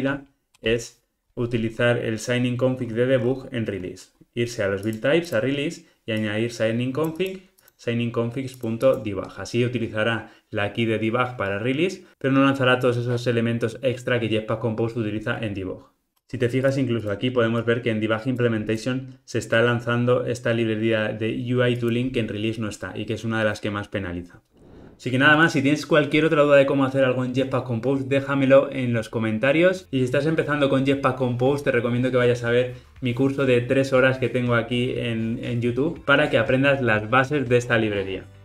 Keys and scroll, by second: 16.1 alt+super+[.